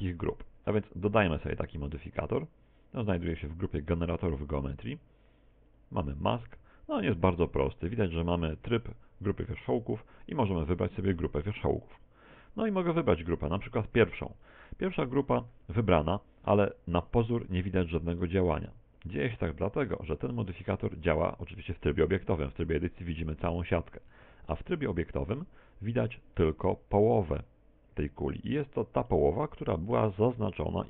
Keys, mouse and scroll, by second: 1.2 click, 2.2 click, 12.7 click, 24.0 Tab, 24.9 middle click, 26.5 middle click, 29.1 middle click, 30.6 KP_1.